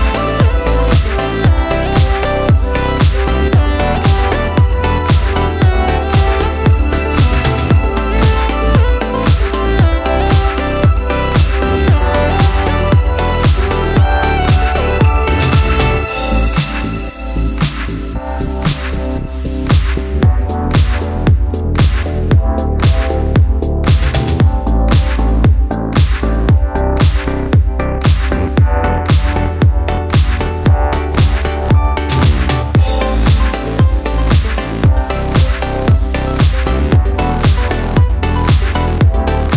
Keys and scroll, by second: 14.9 Escape, 24.4 ctrl+a, 30.6 ctrl+c, 31.5 ctrl+v, 33.1 ctrl+a, 37.1 ctrl+a.